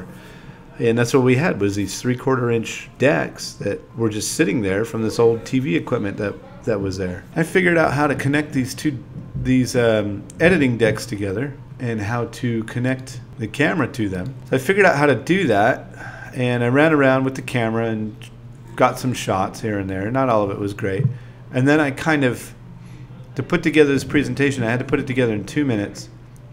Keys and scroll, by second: 0.9-3.0 typing, 4.6 space, 5.8 2, 6.5 ,, 9.6-11.0 typing, 12.1-15.2 typing, 19.8-24.4 typing.